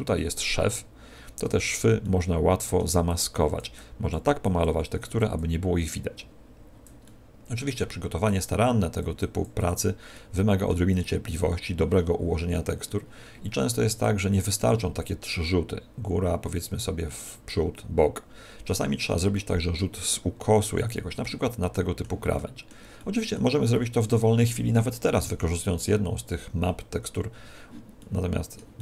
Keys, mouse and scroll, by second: 1.3 Tab, 1.9 middle click, 3.0 click, 7.1 middle click, 8.2 click, 9.4 click, 10.2 click, 10.2 middle click, 10.9 click, 14.2 middle click, 19.3 middle click, 20.0 middle click, 21.3 middle click, 22.4 middle click, 27.9 middle click, 28.7 middle click.